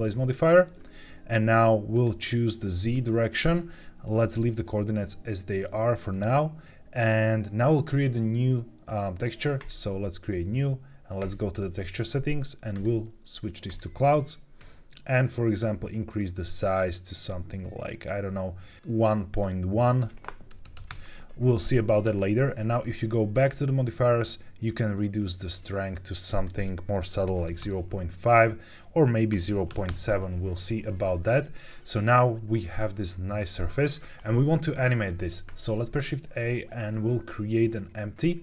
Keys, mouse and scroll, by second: 1.8-4.7 drag, 9.5-11.6 drag, 12.6-13.7 drag, 16.1-19.4 drag, 19.7-20.8 drag, 23.2 click, 24.6-25.9 drag, 26.3-27.5 drag, 28.5-29.9 drag, 35.8 shift+a.